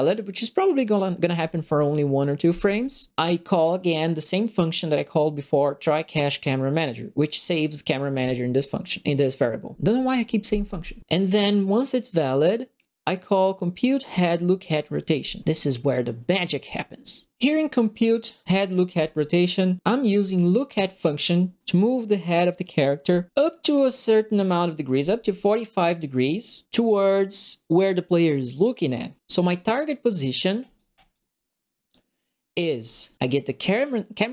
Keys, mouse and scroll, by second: 16.1 right click, 20.2 middle click, 20.6 right click, 30.5 right click, 30.9 right click, 31.3 right click, 33.1 click.